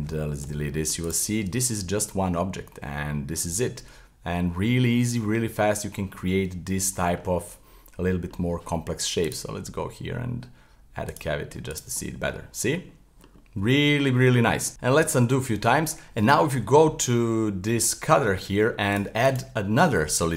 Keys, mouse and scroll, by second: 0.4 Delete, 0.7-1.1 middle drag, 1.1 right click, 1.4 Tab, 1.7-3.4 middle drag, 3.4 Tab, 3.8-9.3 middle drag, 9.3-11.7 drag, 11.7 right click, 12.0-14.7 middle drag, 14.7 z, 15.0 z, 15.1 z, 15.9-18.5 middle drag, 18.9-20.3 drag.